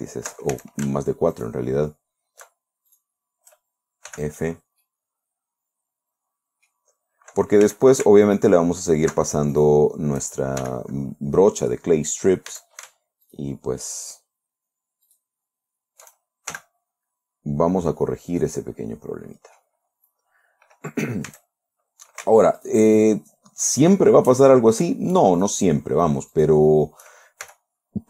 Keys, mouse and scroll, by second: 0.0 alt+shift+right click, 1.0 alt+shift+a, 1.8 alt+shift+right click, 3.4 alt+shift+right click, 4.6 f, 5.3-7.4 drag, 8.1 a, 8.7 alt+shift+right click, 10.0 alt+shift+right click, 11.1 shift+f, 13.0 a, 13.8 alt+shift+right click, 15.6 alt+shift+right click, 17.0 alt+shift+f, 18.0-18.8 scroll down 2, 18.8 scroll down 1, 18.9-20.2 drag, 20.4 scroll up 2, 21.8 a, 23.0 alt+shift+right click, 25.8 shift+right click, 26.8 shift+right click, 27.9 shift+f.